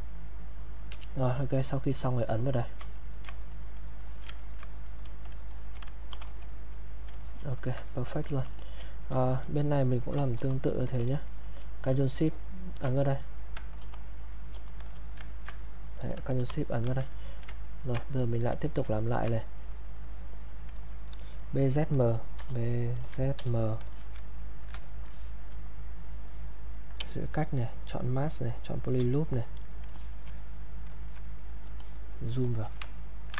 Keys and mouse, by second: 0.9 q, 1.2 click, 3.0 ctrl+right click, 3.5 click, 4.0 alt+click, 4.4 ctrl+right click, 5.1 ctrl+click, 6.1 shift+f, 6.4 click, 6.4 click, 7.9 click, 9.3 alt+click, 9.6 click, 10.4 shift+f, 12.4 ctrl+shift+click, 12.9 shift+click, 13.8 shift+f, 15.3 ctrl+click, 15.6 click, 16.4 shift+f, 17.1 alt+click, 17.7 ctrl+right click, 18.2 ctrl+click, 19.0 ctrl+right click, 19.4 click, 22.4-23.4 typing, 23.9 alt+click, 24.3 ctrl+right click, 25.1 alt+click, 27.0 space, 29.4 click, 31.3 click, 32.9 ctrl+right click.